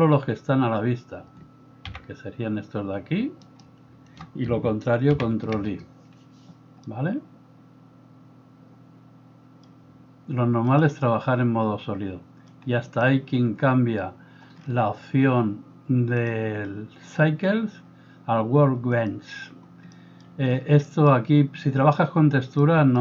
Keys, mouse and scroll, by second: 1.9 g, 5.2 ctrl+i, 12.5-16.3 drag, 12.7-17.2 middle drag, 17.2-23.0 drag, 19.9 middle click, 22.6-23.0 middle drag.